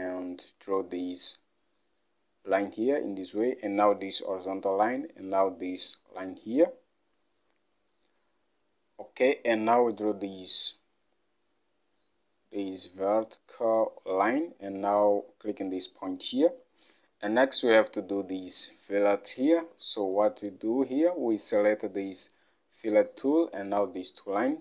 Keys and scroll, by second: 17.0 alt+Tab.